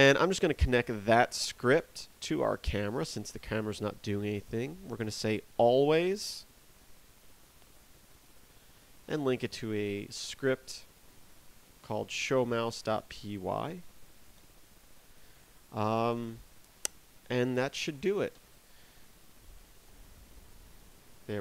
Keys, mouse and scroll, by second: 1.0 right click, 18.3 ctrl+Down.